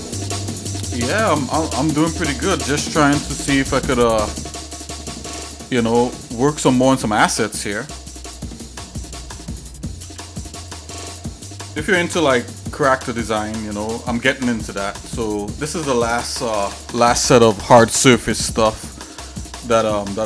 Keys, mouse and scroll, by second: 2.2 middle click, 8.5 shift+middle click, 9.5 middle click, 10.1 ctrl+s, 10.6 click, 11.2 click, 12.6 shift+middle click, 13.4 middle click, 13.9 shift+middle click, 14.4 middle click.